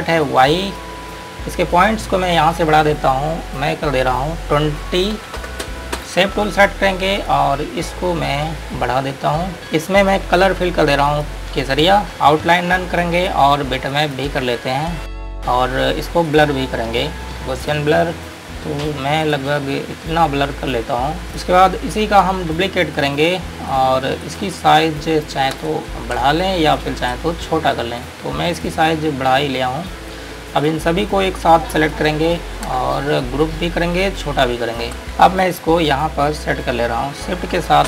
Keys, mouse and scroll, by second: 0.8 ctrl+click, 2.4 click, 5.4 KP_2, 6.3 KP_Enter, 7.4 click, 8.1 scroll up 1, 9.7 click, 15.4 Return, 16.5 click, 25.9 ctrl+space, 26.7 click, 28.3 click, 30.4 scroll down 1, 30.9 click, 33.5 click, 35.2 click.